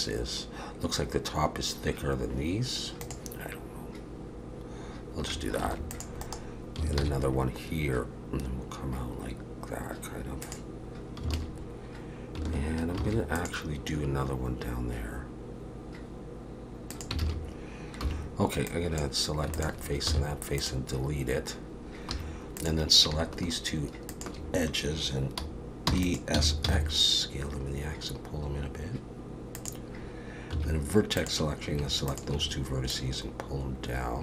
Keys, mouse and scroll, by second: 5.6 ctrl+r, 7.0 ctrl+b, 11.3 alt+a, 13.0 ctrl+r, 17.2 alt+a, 18.0 3, 18.7 click, 19.5 shift+click, 20.1 x, 22.1 2, 22.6 click, 24.1 shift+click, 25.9 e, 26.3 s, 30.5 1, 31.2 click, 32.1 shift+click, 32.9 click.